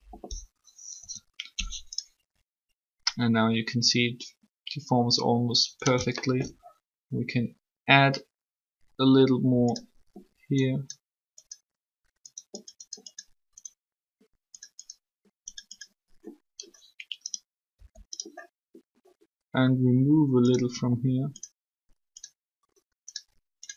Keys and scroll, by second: 0.7 3, 17.5 r.